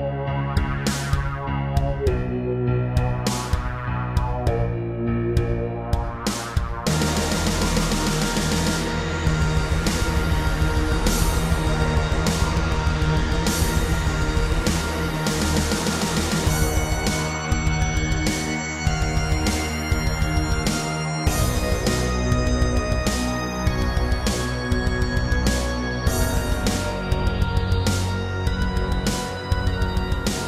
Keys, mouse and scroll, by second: 0.0 shift+middle click, 0.4 middle click, 1.2-3.3 typing, 2.1 Escape, 2.3 Escape, 3.7 click, 4.2 middle click, 4.8 shift+middle click, 5.2 middle click, 6.3 click, 6.8 middle click, 7.3 e, 9.2 click, 10.7 3, 11.3 b, 11.7 click, 12.3 scroll down 2, 12.6 shift+middle click, 13.4 r, 14.4 Escape, 16.0 click, 16.4 shift+middle click, 17.0-17.5 typing, 18.4 click, 18.5 typing, 23.0 click, 23.4 r, 25.8 click, 30.2 ctrl+z.